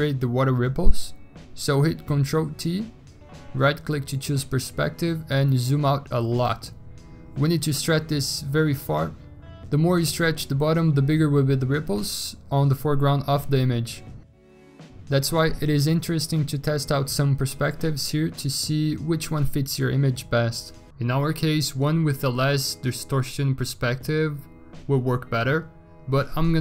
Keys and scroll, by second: 2.2 ctrl+t, 22.1 ctrl+t.